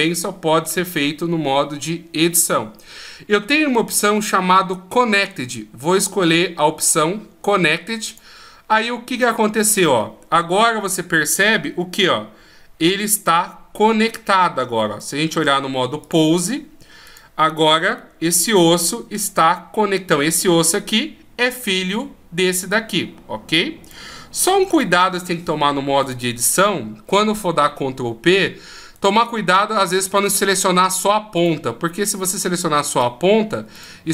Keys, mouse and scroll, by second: 9.1 middle click, 10.7 right click, 11.6 g, 14.8 click, 16.9 right click, 17.6 g, 19.1 Escape, 20.1 right click, 21.3 right click, 23.7 click, 25.9 right click, 28.8 right click, 31.2 right click, 32.1 right click, 33.6 right click.